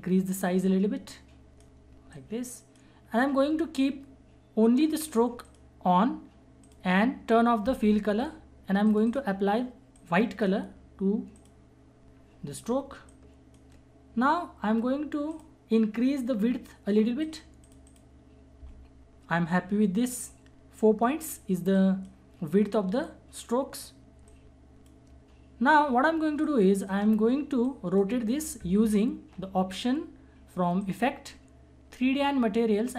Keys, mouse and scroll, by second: 21.7 click, 24.3-26.4 shift+drag, 26.4-30.6 shift+drag, 30.8 click.